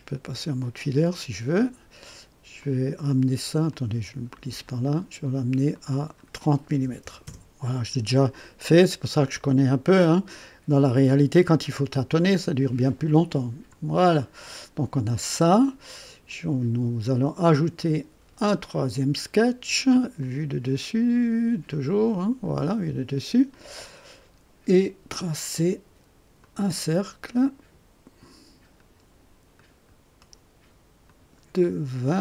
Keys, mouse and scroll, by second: 2.6 click, 3.7-4.5 drag, 4.6 click, 5.7 click, 7.0 KP_0, 7.2 KP_Enter, 11.5-12.9 drag, 13.7 click, 15.3 click, 17.7 click, 20.2 click, 21.7 click, 23.5 click, 26.4 click, 28.7 click, 29.5 click, 30.2 right click, 31.0 click, 32.1 click.